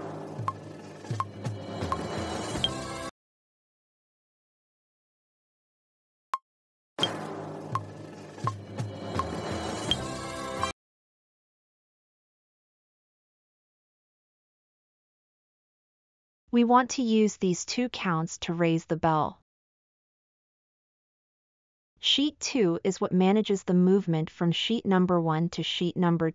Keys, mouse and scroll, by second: 3.4 space, 6.3 space.